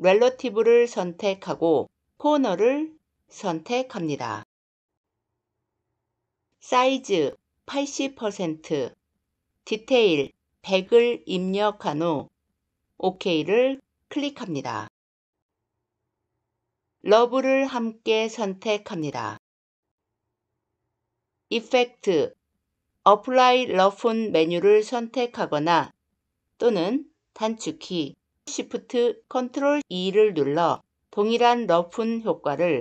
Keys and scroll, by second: 28.3 ctrl+shift+e.